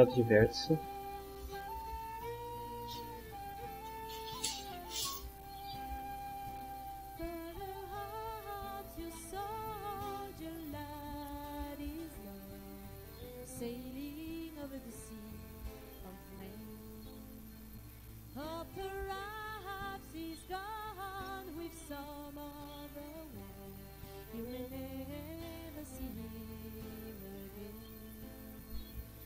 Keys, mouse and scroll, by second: 1.1 right click, 6.6 click, 8.1-9.2 drag, 9.2-10.4 middle drag, 11.0-12.8 drag, 14.0 click, 15.4-17.1 drag, 18.3-19.8 drag, 21.8-22.8 middle drag, 23.2-26.8 middle drag, 27.1 middle click.